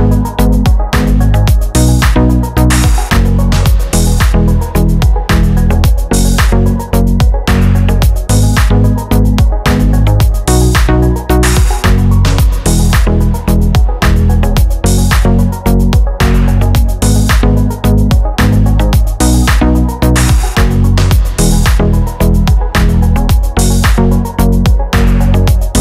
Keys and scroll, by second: 16.1 super+c, 16.4 super+v.